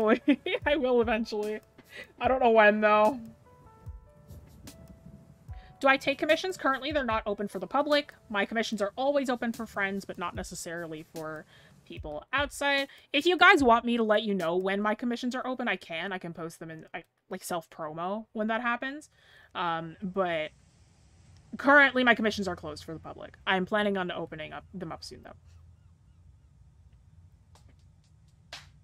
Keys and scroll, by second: 11.0-11.5 scroll down 1, 16.5-17.0 scroll up 1.